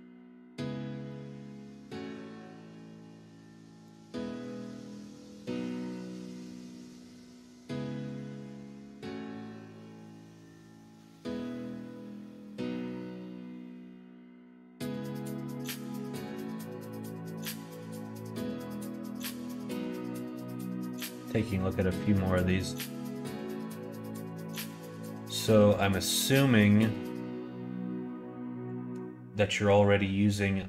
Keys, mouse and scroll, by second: 15.9-17.2 middle drag.